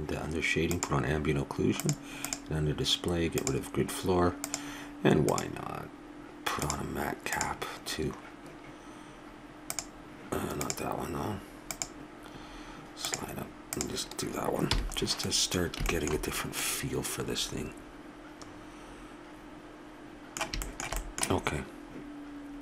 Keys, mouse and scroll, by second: 14.7 n, 15.0-18.5 middle drag, 19.0-20.6 middle drag.